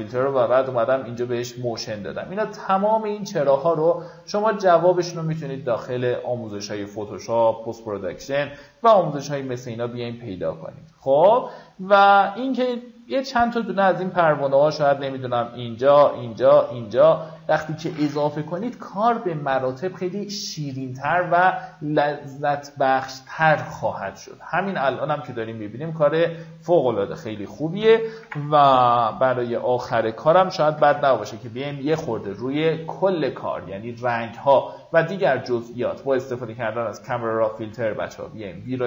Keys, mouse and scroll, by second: 6.6-7.0 alt+scroll down 1, 7.2-8.0 alt+scroll down 2, 9.0-18.3 drag, 18.9 Delete, 19.8-20.2 alt+scroll down 1, 20.4 alt+scroll up 1, 22.0-22.3 scroll down 1, 26.3-27.4 scroll up 1, 27.4 click, 28.5 ctrl+alt+shift+e, 31.0 ctrl+shift+a, 36.3-38.3 drag.